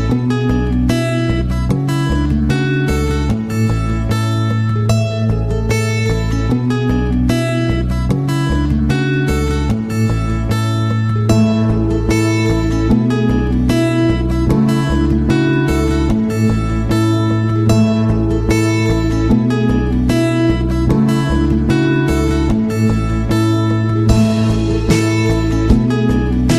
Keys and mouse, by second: 1.1 shift+middle drag, 1.5-2.2 middle drag, 2.7 shift+middle drag, 3.3-4.1 shift+middle drag, 4.5 right click, 4.9 shift+middle click, 5.9 middle drag, 6.4 Tab, 7.2 middle click, 7.9 g, 9.5 middle click, 10.1 g, 11.1 Tab, 11.4 KP_1, 12.5 shift+middle drag, 13.0-13.5 middle drag, 14.2 right click, 21.4-21.9 right drag, 21.9-23.0 middle drag, 23.5 shift+middle click, 24.0-24.4 middle drag, 24.6 z, 26.0 middle click, 26.4-26.5 middle drag.